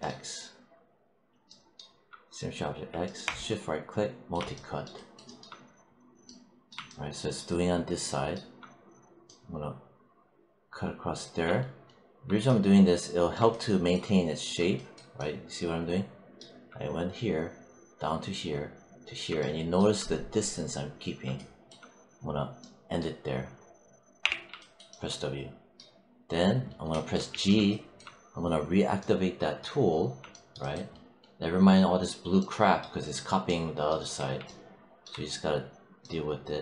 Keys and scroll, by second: 24.1 w, 27.2 g.